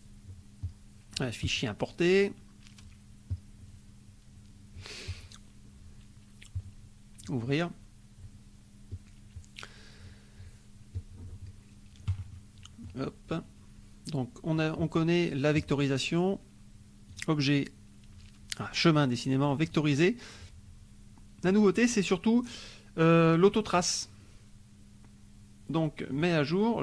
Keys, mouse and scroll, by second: 0.6 click, 1.5 click, 3.3-3.7 drag, 5.1 click, 7.2-7.8 drag, 8.9 click, 10.9 click, 12.3 middle click, 12.3-12.8 scroll down 1, 12.8 scroll up 1, 13.3-14.7 drag, 17.0 click, 19.6 click, 21.5-24.0 drag, 26.1 click.